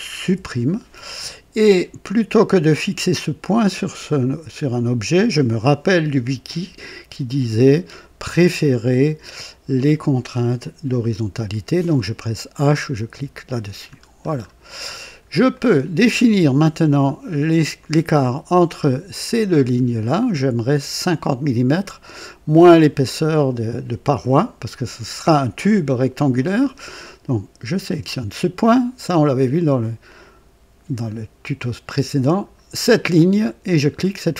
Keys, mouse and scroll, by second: 0.2 Delete, 2.7 click, 6.4 click, 9.7 click, 13.0 h, 13.9-14.4 scroll down 2, 14.8-15.2 scroll up 2, 15.5-16.1 right drag, 17.7 click, 18.7 click, 27.7 click, 32.2 click.